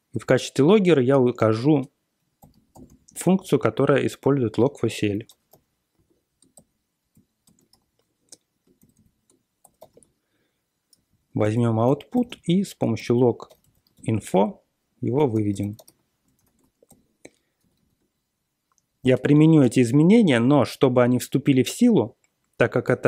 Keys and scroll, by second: 0.0-0.1 typing, 0.5 Return, 1.1 shift+9, 2.1-6.4 typing, 6.5 ctrl+l, 7.1 ctrl+l, 7.4 ctrl+x, 8.8 ctrl+l, 8.9 ctrl+l, 9.3-16.3 typing, 11.4 Return, 16.3 ctrl+x, 16.4 ctrl+s, 16.8 ctrl+l, 17.6 ctrl+c.